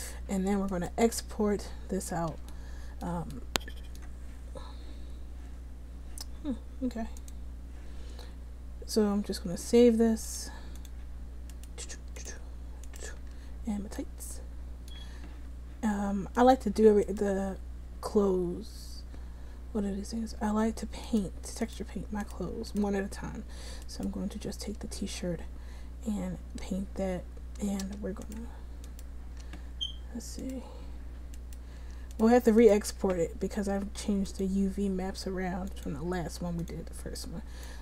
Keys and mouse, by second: 0.9 click, 1.6-9.7 right drag, 11.0 click, 11.6 middle click, 12.3-14.1 drag, 14.1 middle click, 14.6-34.4 drag, 34.4-37.8 middle drag.